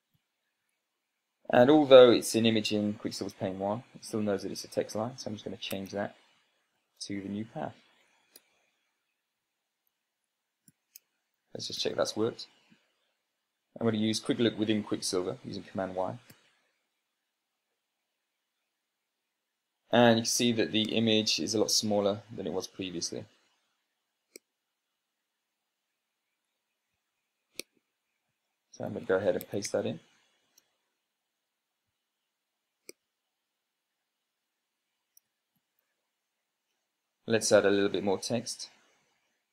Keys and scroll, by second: 0.5-1.4 typing, 6.5 Tab, 7.6 super+v, 8.8 Return, 11.6 ctrl+p, 12.5 Down, 12.6 Down, 17.9 super+y, 27.6 Tab, 29.2 super+space, 29.6 Tab, 29.9-30.9 typing, 31.2 Return, 34.9 Return, 35.2 Return, 36.4 ctrl+p, 38.1 Down, 38.3 Down, 38.6 Down, 38.8 Down, 39.0 Down.